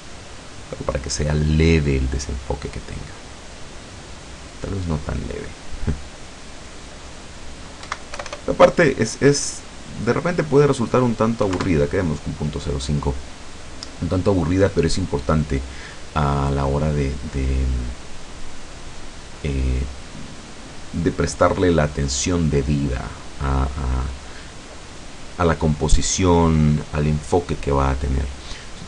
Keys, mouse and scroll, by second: 6.6 click, 7.9 Right, 8.2 BackSpace, 11.5 KP_5, 11.7 KP_Enter.